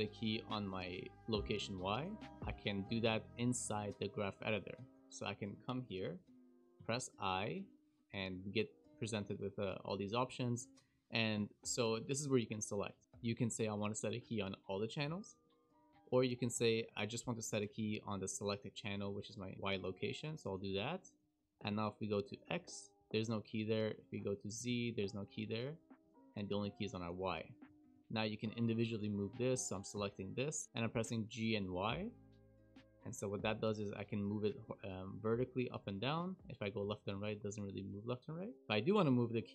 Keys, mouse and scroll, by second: 0.5 click, 2.8 shift+middle click, 4.4 click, 21.1 click, 22.2 click, 23.0 click, 23.0-24.1 scroll down 4, 23.0 KP_Decimal, 24.1 click, 24.2 click, 24.6 KP_Decimal, 25.3 click, 26.0 click, 26.1 click, 27.0 click, 27.0 KP_Decimal, 27.3-28.3 scroll down 7, 28.3 shift+middle click, 29.0 click, 30.5 shift+middle click, 30.6 g.